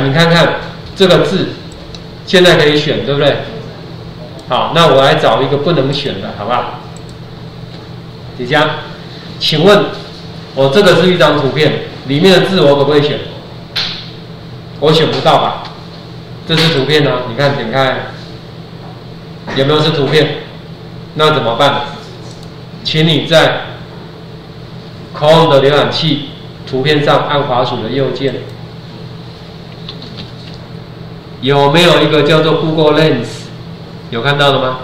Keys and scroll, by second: 30.1 ctrl+4.